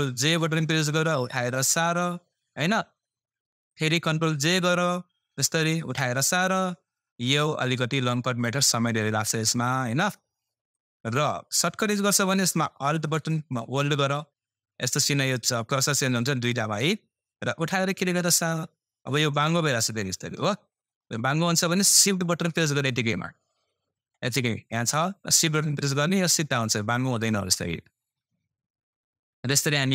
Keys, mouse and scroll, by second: 0.1 ctrl+j, 1.1-5.7 drag, 5.7 ctrl+j, 6.4-11.9 drag, 11.9 Left, 16.8 typing, 17.6-27.6 alt+drag, 22.8 typing.